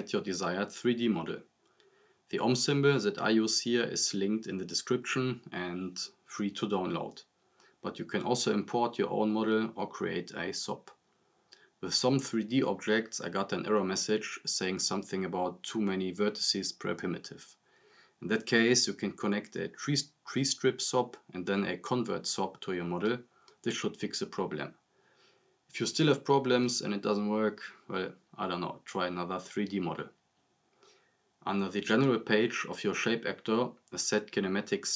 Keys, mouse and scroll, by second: 9.2 scroll up 1, 9.7 click, 15.9 scroll down 1, 31.0 scroll down 1, 34.7 click.